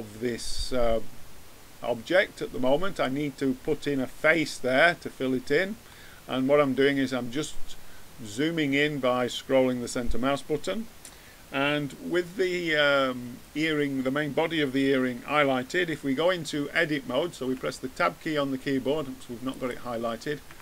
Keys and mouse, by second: 5.2-7.1 middle drag, 17.4 Tab, 20.5 Tab.